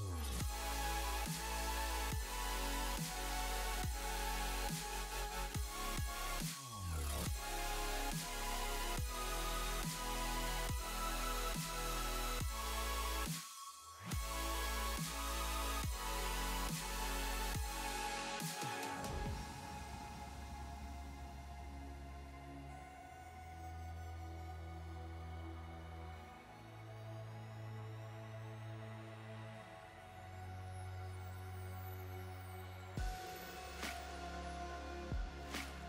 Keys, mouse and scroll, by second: 1.2 click, 2.5 space, 4.6 click.